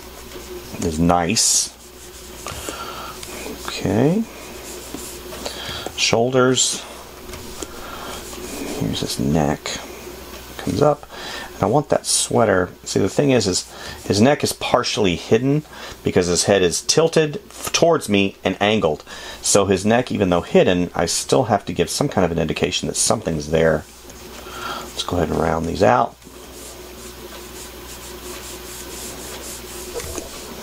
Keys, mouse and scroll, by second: 2.9 space, 6.0 space, 8.0 space, 14.2 space, 26.5 space.